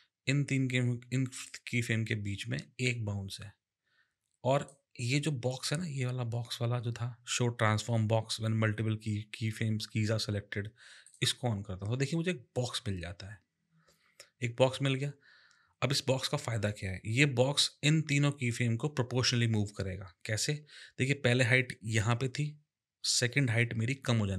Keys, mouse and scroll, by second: 1.4 click, 11.0 click.